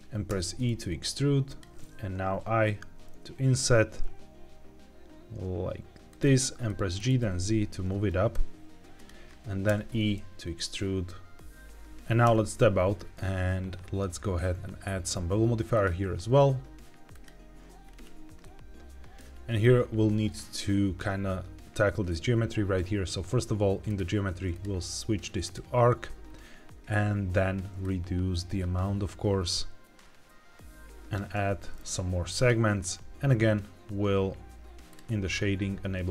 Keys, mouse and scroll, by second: 0.2 e, 1.4 click, 2.2 i, 6.0 shift+click, 6.6 middle click, 7.0 g, 7.1 z, 8.9 click, 9.2-9.6 scroll down 1, 9.6 e, 11.9 Tab, 12.9-15.3 scroll up 1, 15.7-17.2 drag, 17.8-18.7 scroll up 3, 18.3 shift+middle click, 19.3-21.0 scroll down 1, 23.8-27.5 drag, 27.7-31.2 shift+drag, 32.2 click, 34.8 click, 35.2-36.1 scroll down 1.